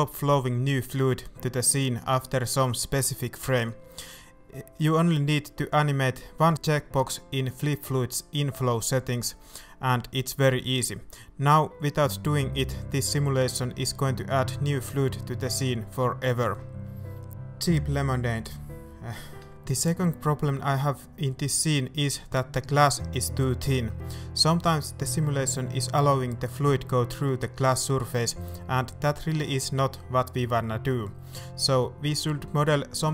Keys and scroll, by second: 1.5 z, 2.8 z, 12.7 shift+a, 16.0 alt+a, 16.4 alt+a, 28.0 shift+a, 28.2 shift+a, 28.8 Tab, 29.3 shift+Tab, 29.5 s, 29.5 z, 30.0 s, 31.5 shift+Tab.